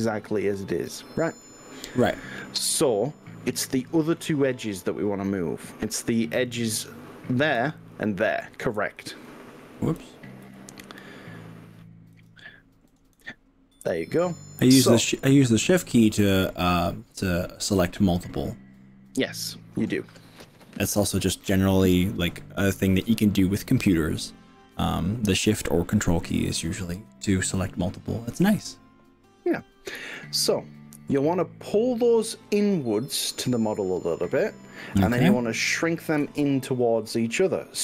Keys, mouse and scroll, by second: 2.5-4.5 middle drag, 4.9-5.5 middle drag, 6.5 alt+click, 7.9 ctrl+alt+click, 9.1 alt+click, 10.1 click, 11.1 alt+shift+click, 12.3 click, 36.2 KP_1.